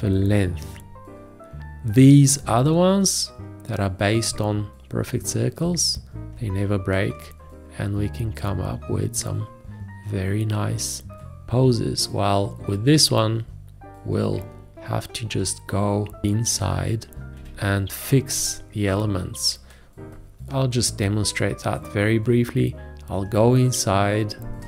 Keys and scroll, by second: 17.3 v.